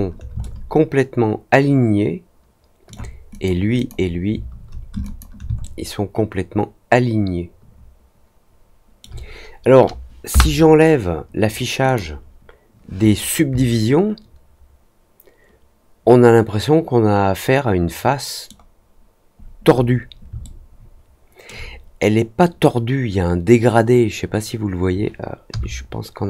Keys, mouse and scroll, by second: 0.3-2.8 alt+middle drag, 3.2 click, 3.7 click, 5.0 ctrl+click, 5.5-8.9 alt+middle drag, 11.8 click, 13.5-18.4 alt+middle drag, 20.4-21.4 alt+middle drag.